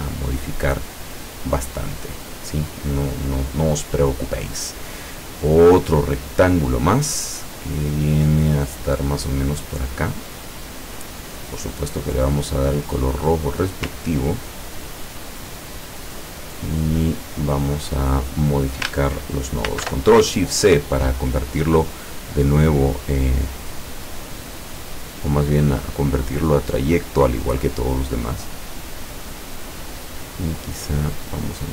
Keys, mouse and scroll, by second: 5.4 click, 9.7-11.2 drag, 12.3 click, 12.9 click, 14.8-15.2 ctrl+scroll up 2, 17.9 click, 19.8 ctrl+shift+c, 25.6-27.7 drag, 31.2 click.